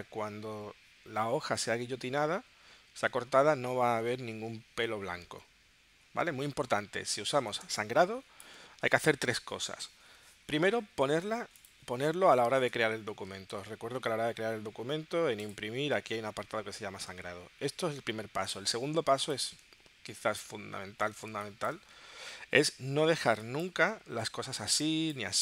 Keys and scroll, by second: 2.5 w, 5.9 w, 7.7 space, 21.3 space.